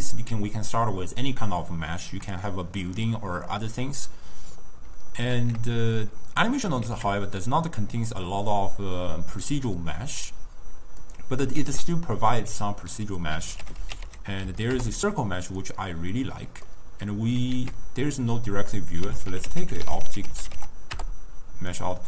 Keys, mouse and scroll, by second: 5.4 ctrl+a, 6.9 shift+a, 11.6 ctrl+a, 16.7-17.6 middle drag, 17.6 ctrl+a.